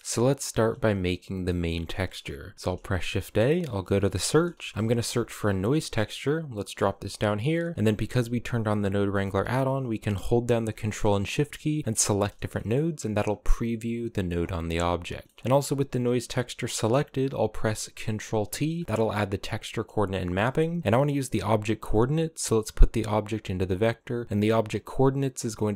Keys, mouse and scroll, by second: 0.0-2.5 middle drag, 2.5 shift+a, 11.8 ctrl+shift+click, 12.2-12.7 middle drag, 12.7-13.8 scroll up 4, 14.3 click, 14.9 middle click, 15.4 click, 18.2 ctrl+t, 18.6 middle click, 18.8 a, 19.4-21.6 scroll down 1, 21.6 click.